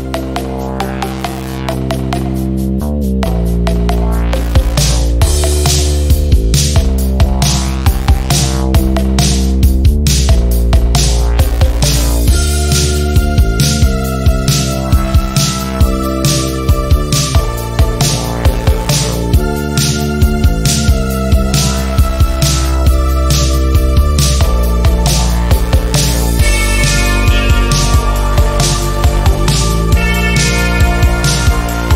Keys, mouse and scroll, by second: 2.9 v, 3.2 click, 3.8 ctrl+scroll down 1, 4.8 click, 5.3 z, 5.8 z, 5.9-6.4 drag, 10.4 o, 11.4-13.3 drag, 14.6-15.6 typing, 17.0 click, 23.5 ctrl+d, 24.4-27.9 alt+shift+drag, 31.4-31.9 alt+shift+drag.